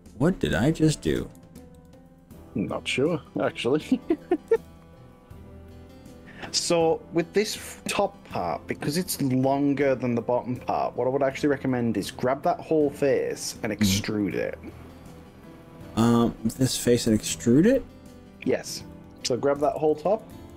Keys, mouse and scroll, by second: 1.8 ctrl+z, 3.4 click, 4.5 g, 11.4 click, 14.4 click, 15.2 click, 19.0 click, 20.0 ctrl+z, 20.4 ctrl+z.